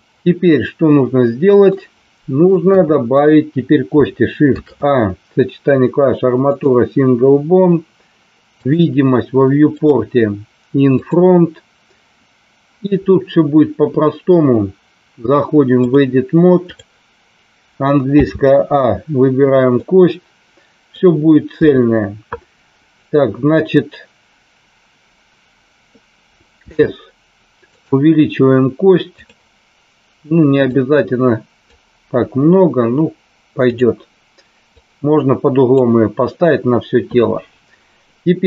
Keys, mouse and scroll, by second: 0.8 middle click, 2.6 KP_1, 4.5 shift+a, 8.4 click, 9.8 click, 11.0 click, 15.7-16.8 drag, 18.1 a, 19.7-20.8 middle drag, 21.6 KP_3, 26.7 s, 27.7 click, 30.8 click, 33.6 click, 34.7-35.7 drag.